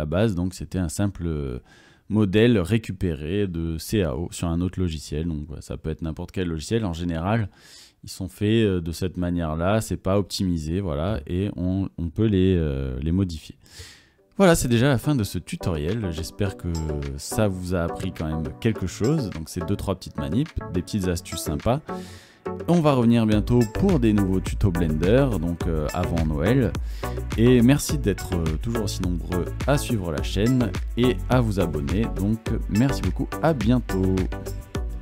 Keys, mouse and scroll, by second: 2.3 click, 3.5 click, 3.9 Tab, 4.6 Tab, 5.0 Tab, 6.0 Tab, 7.1 right click.